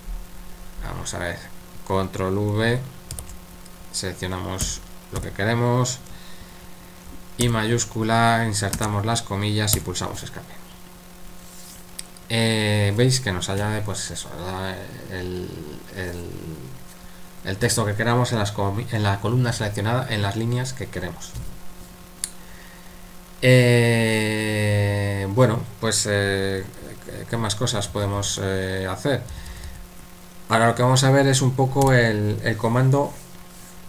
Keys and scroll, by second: 3.1 ctrl+v, 4.6-5.2 typing, 7.4 typing, 8.7 typing, 9.7 Escape, 27.9 typing, 29.3-29.6 typing, 31.8 typing.